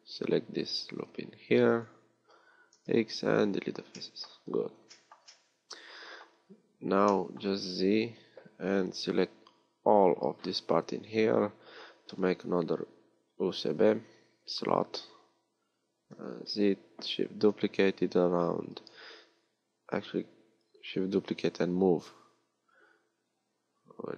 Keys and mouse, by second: 1.0 b, 8.1 z, 16.2 z, 17.5 shift+d.